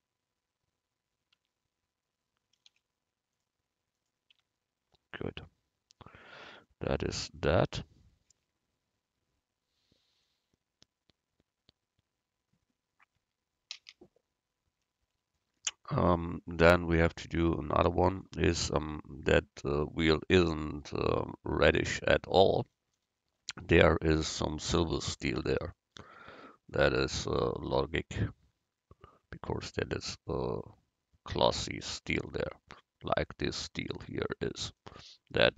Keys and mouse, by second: 1.5 Tab, 2.7 u, 4.5 Tab, 16.9 middle click.